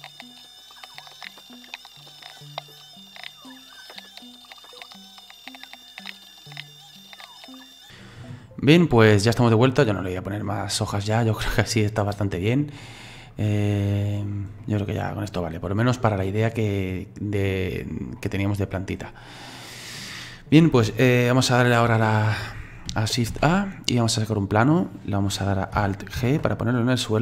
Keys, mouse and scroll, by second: 0.0-1.8 typing, 0.0 click, 0.0 middle click, 0.2 click, 0.3 middle click, 0.3 click, 0.4 click, 0.6 right click, 0.7 click, 0.8 middle click, 1.0 shift+middle click, 1.3 click, 1.5 click, 1.6 click, 1.7 click, 1.8 click, 1.9 middle click, 2.0 click, 2.1 click, 2.2 shift+middle click, 2.3 click, 2.5 click, 2.6 scroll down 3, 2.6 middle click, 2.6 click, 2.8 right click, 3.0 click, 3.1-7.4 typing, 3.2 Delete, 3.2 click, 3.5 click, 3.5 click, 3.7 click, 4.1 click, 4.2 right click, 4.2 click, 4.5 middle click, 4.8 click, 4.9 shift+middle click, 5.1 right click, 5.1 middle click, 5.2 click, 5.3 click, 5.5 click, 5.6 click, 5.8 middle click, 6.0 right click, 6.1 click, 6.1 middle click, 6.1 click, 6.3 middle click, 6.4 click, 6.4 middle click, 6.5 Delete, 6.6 click, 6.8 click, 6.8 click, 6.9 middle click, 6.9 click, 7.2 middle click, 7.5 click, 7.5 scroll down 3, 7.7 middle click, 7.8 ctrl+z, 8.3 click, 9.4-12.8 middle drag, 13.2 click, 14.2 click, 14.6-24.5 middle drag, 24.5 shift+a, 26.2 alt+g.